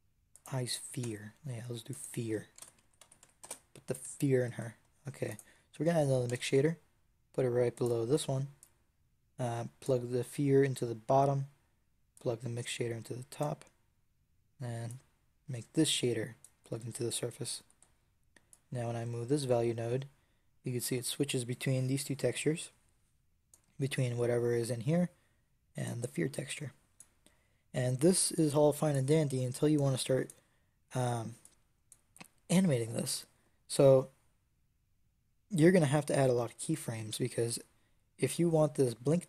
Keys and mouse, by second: 0.9 Tab, 1.8-4.1 drag, 4.3 click, 6.1 shift+d, 9.6 click, 12.0-14.4 drag, 14.7-16.5 drag, 19.7-25.1 drag, 25.7-27.8 drag, 28.2-36.1 drag.